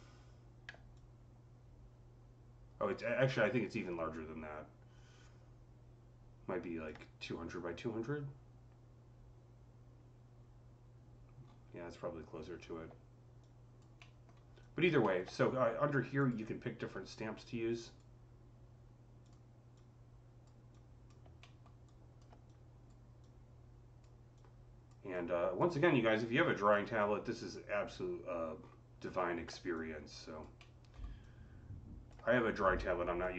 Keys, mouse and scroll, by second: 0.8-9.1 drag, 11.3 click, 11.3 scroll down 5, 11.3 c, 12.5-13.3 scroll up 2, 13.3-15.2 alt+drag, 13.8 alt+middle click, 16.0 click, 17.7 click, 19.1 click, 19.6-22.3 drag, 21.3 alt+middle click, 21.7-24.2 alt+right drag, 22.3-28.5 drag, 28.5 scroll up 5, 29.0 scroll down 5, 29.6-33.3 alt+drag, 30.4-33.3 alt+middle drag, 32.9 typing.